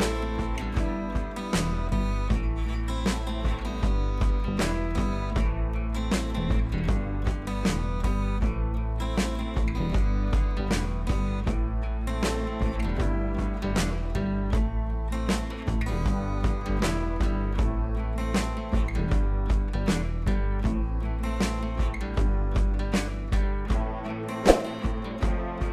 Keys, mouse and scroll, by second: 0.5-1.4 scroll up 2, 2.1 scroll up 2, 2.4 space, 2.5 click, 2.7 space, 4.6 click, 5.1-8.0 typing, 7.2 scroll down 1, 7.7 click, 9.2 ctrl+z, 9.9 click, 10.4 ctrl+t, 10.7 click, 11.1-12.3 shift+drag, 14.5 scroll down 1, 15.5-17.1 drag, 17.5 scroll up 1, 17.8 scroll down 1, 18.0 ctrl+t, 18.3 scroll up 1, 18.4 scroll down 1, 19.0-20.4 drag, 20.3 scroll up 1, 21.1-21.7 shift+click, 21.8 scroll down 1, 22.2-22.7 drag, 23.2 scroll down 1, 25.2 click.